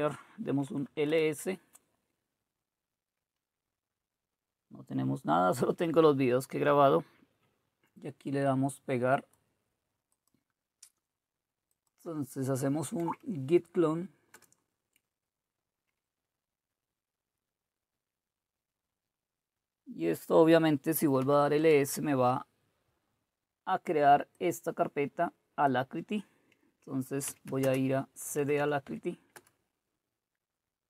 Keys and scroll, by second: 0.0-1.4 typing, 13.0 Right, 14.3 Return, 21.0-21.7 typing, 27.2-29.1 typing, 29.4 Return.